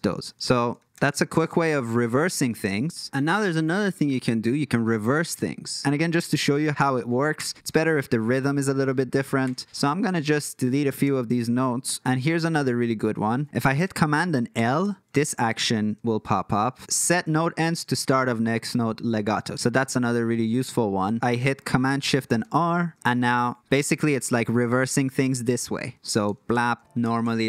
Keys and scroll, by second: 0.4 super+z, 0.8 super+z, 1.2 super+z, 1.6 super+z, 7.4 BackSpace, 9.4 BackSpace, 11.0 BackSpace, 14.5 super+l, 22.4 shift+super+r, 26.3 shift+super+r, 27.0 shift+super+r.